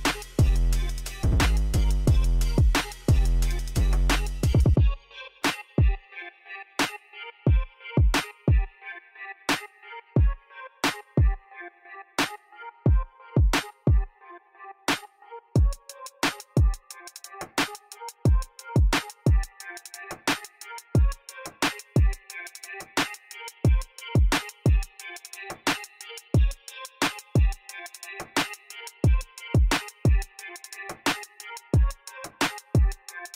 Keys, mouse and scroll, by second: 1.0 KP_0, 1.3 KP_8, 1.5 Return, 2.4 click, 3.0 KP_1, 3.2 Return, 3.9 middle click, 4.2 middle drag, 4.9 Escape, 5.2-7.0 middle drag, 7.4-7.9 shift+middle drag, 10.2 shift+middle click, 10.5 shift+middle click, 12.4-12.9 shift+middle drag, 13.2 scroll down 1, 13.6 shift+middle drag, 14.0 shift+middle click, 14.4 shift+middle click, 14.9-15.9 shift+middle drag, 16.4 shift+click, 17.4 shift+click, 19.2 shift+click, 20.1 shift+click, 20.9 shift+click, 22.2 shift+click, 22.9 shift+click, 23.4 shift+middle click, 25.9 shift+click, 26.5 shift+click, 27.5 shift+click, 28.4 shift+click, 28.8 shift+click, 29.3 shift+click, 29.6 shift+click, 30.5 shift+click, 31.1 shift+click, 31.5 shift+click, 32.0 shift+click, 32.5 shift+click, 32.8 shift+click, 33.2 shift+click.